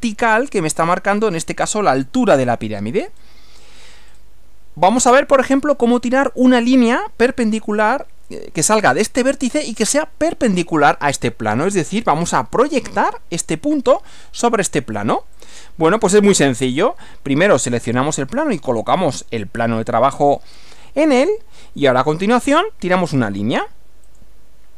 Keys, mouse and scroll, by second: 3.2 scroll down 2, 3.8 scroll down 2, 4.1 scroll up 2, 15.4 click, 17.7 click, 19.0 click, 24.1 click.